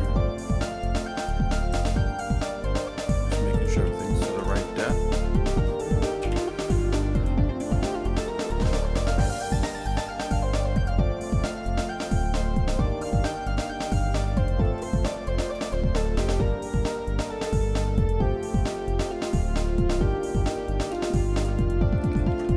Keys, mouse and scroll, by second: 2.1-3.5 shift+middle drag, 3.8 ctrl+z, 4.6 shift+middle click, 6.2 KP_1, 9.5 middle click, 11.6-13.5 shift+middle drag, 13.7 scroll down 1, 14.3 shift+middle click, 15.1 shift+middle click, 16.3-21.7 drag, 22.2 scroll up 2, 22.3 ctrl+z.